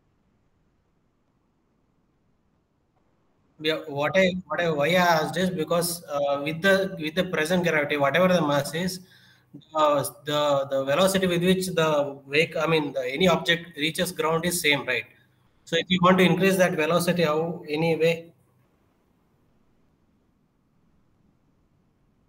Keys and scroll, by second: 5.6 0, 6.0 Return.